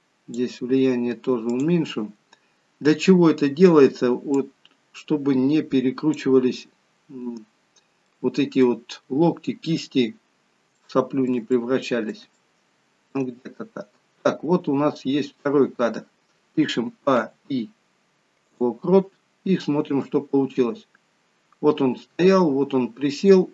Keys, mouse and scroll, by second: 3.2-4.1 scroll down 3, 4.4 click, 4.4-6.3 scroll down 2, 7.7 scroll up 2, 8.0 middle click, 10.0-10.5 scroll down 2, 10.8 shift+middle click, 11.6 middle click, 12.4 shift+middle click, 13.3-13.9 scroll down 1, 14.6-15.0 scroll down 1, 16.9 a, 17.2 i, 20.1 click.